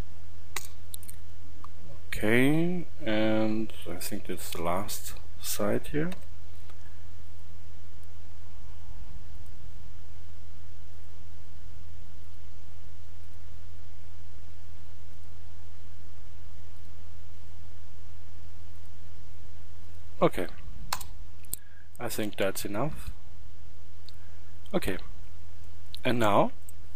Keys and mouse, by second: 1.3-3.2 middle drag, 6.1 k, 21.6-23.6 middle drag.